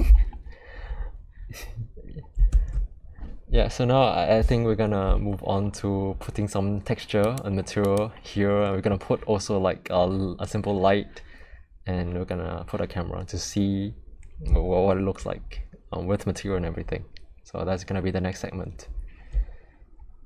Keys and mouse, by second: 2.5 alt+2, 7.2 click, 8.6 middle click.